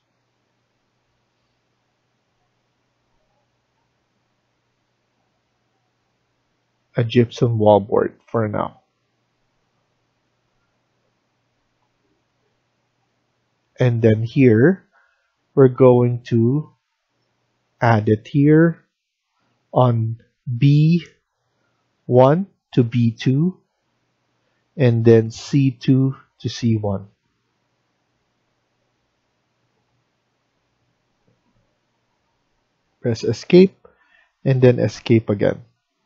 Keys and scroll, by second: 33.3 Escape, 34.5 Escape.